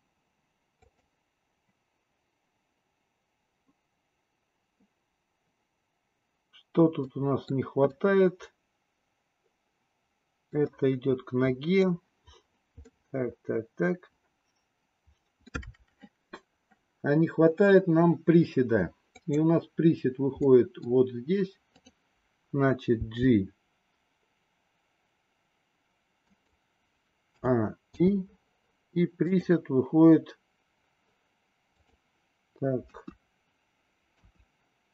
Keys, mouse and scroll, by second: 0.9 click, 7.0-7.5 middle drag, 7.9-9.7 middle drag, 10.1-10.5 middle drag, 10.7-12.0 middle drag, 12.8-15.2 middle drag, 15.3 middle click, 19.2 click, 20.4 middle click, 21.6 click, 22.9 g, 27.3 a, 27.9 i, 29.3 click, 31.7 click, 32.8 KP_1, 34.0 KP_3.